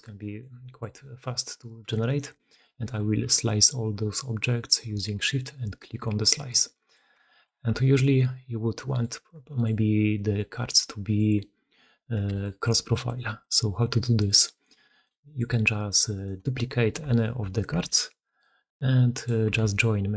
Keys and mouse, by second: 0.0-13.7 typing, 0.0 middle drag, 0.5 middle drag, 1.9 shift+middle drag, 2.2-2.5 middle drag, 4.4-6.5 shift+middle drag, 6.8 shift+middle drag, 7.6-9.4 alt+middle drag, 7.7 alt+a, 9.6-10.0 middle drag, 10.3-10.7 middle drag, 10.7 click, 12.3 click, 12.8 click, 13.3-13.7 drag, 13.9-14.3 drag, 14.9 shift+middle click, 15.1 middle drag, 16.0 middle click, 16.7 middle click, 17.3 shift+middle click, 17.8 shift+d, 19.4 r.